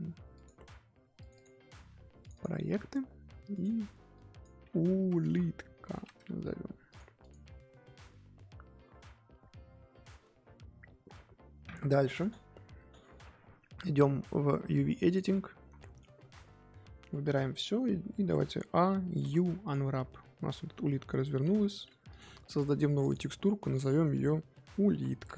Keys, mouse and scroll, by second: 11.7-15.1 middle drag, 15.1 click, 15.7 middle click, 16.6-16.9 scroll up 2, 16.9 Tab, 17.5 click, 18.0 Tab, 18.3 a, 19.7 u, 21.5 Tab, 21.8 Tab, 22.2 click.